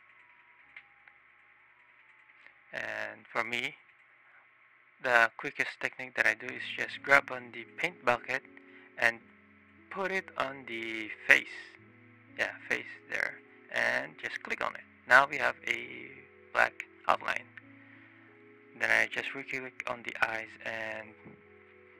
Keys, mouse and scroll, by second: 0.9-2.2 drag, 3.0 click, 3.4-4.0 drag, 8.9 click, 9.8 click, 12.7 click, 13.8 click, 15.9 click, 19.1 click, 21.1 shift+click, 21.7 shift+click.